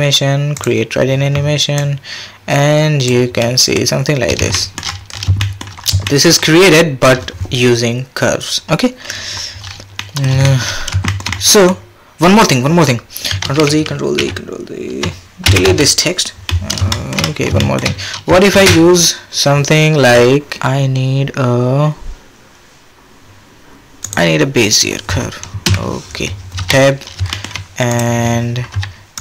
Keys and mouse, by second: 1.8-3.1 drag, 3.4 drag, 4.5 shift+drag, 5.4 shift+drag, 6.2 shift+middle click, 10.0 middle drag, 10.4 shift+middle click, 13.4 ctrl+z, 13.7 ctrl+z, 14.2 ctrl+z, 15.4 x, 17.0 shift+click, 17.6 shift+drag, 18.5 shift+a, 25.6 KP_7, 26.6 Tab, 27.3 shift+click, 27.9 click, 28.7 g.